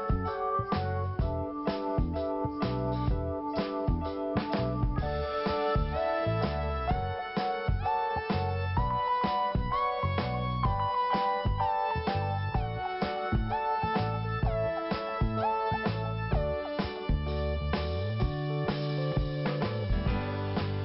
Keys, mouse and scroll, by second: 0.5 click, 2.0 click, 4.0 click, 5.7 click, 6.3 scroll down 1, 9.5-9.9 scroll up 1, 10.1-10.7 scroll down 1, 11.4 scroll down 1, 14.7 scroll up 1, 16.5 click, 17.7 click, 19.9 scroll down 1.